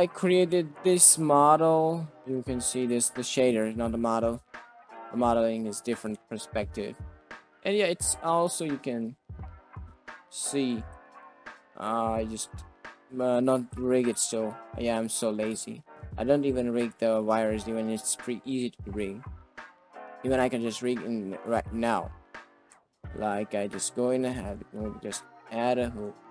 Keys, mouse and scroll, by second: 0.9 shift+middle click, 1.2-1.6 middle drag, 1.6-2.2 drag, 2.2-2.6 middle drag, 2.6 drag, 2.7 middle click, 2.9 click, 3.6 shift+middle drag, 5.1 click, 5.6-6.0 middle drag, 6.6-6.9 middle drag, 7.9 middle drag, 8.5 shift+middle click, 8.8 middle click, 9.2 middle click, 9.6 middle drag, 10.3 click, 10.6 r, 12.5 shift+middle drag, 13.1 middle click, 13.4 r, 16.4 middle click, 16.7 r, 20.0 click, 20.4 middle click, 20.7 click, 22.6 Tab, 24.0 alt+z, 24.4 click, 24.8 space, 26.0 Tab.